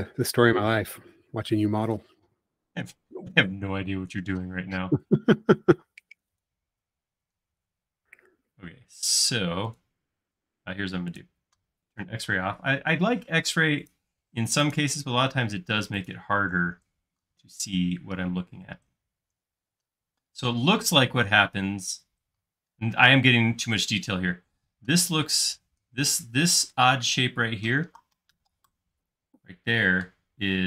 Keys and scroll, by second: 4.5 space, 8.9 space, 12.3 x, 14.0-14.8 typing, 16.7 space.